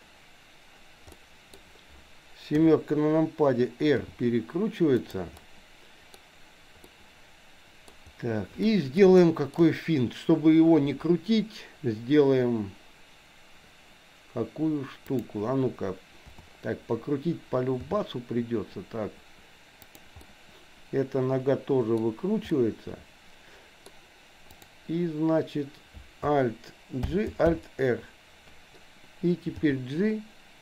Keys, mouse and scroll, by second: 1.1 middle click, 2.6 KP_7, 4.0 r, 5.4 middle click, 6.9-7.9 middle drag, 7.9-8.6 scroll down 1, 8.6 middle click, 9.2 shift+middle click, 15.2 click, 16.2 KP_7, 17.9 r, 20.4-22.0 middle drag, 22.5-23.9 middle drag, 24.5 click, 27.0 alt+g, 27.6 alt+r, 29.5 g.